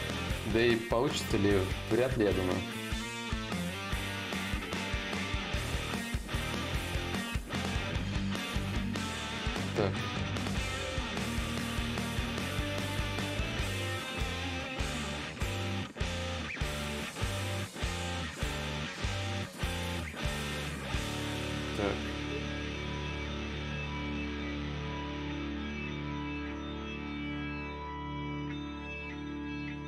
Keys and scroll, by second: 4.6 4, 10.6 ,, 20.4 s.